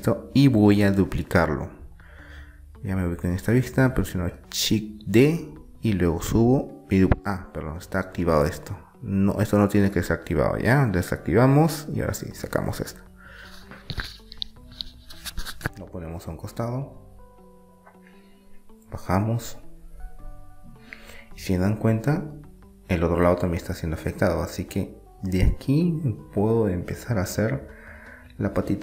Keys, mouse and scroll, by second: 0.6-1.8 middle drag, 1.2 KP_1, 4.4 shift+d, 5.8-7.2 drag, 7.2 ctrl+z, 7.8 middle click, 11.1-12.8 drag, 13.2-14.8 middle drag, 14.8-16.2 drag, 16.2 middle click, 17.0-18.2 middle drag, 18.9-20.2 drag, 20.2-21.9 middle drag, 22.5-23.9 drag, 23.9 middle click, 25.2 middle click, 28.3 click.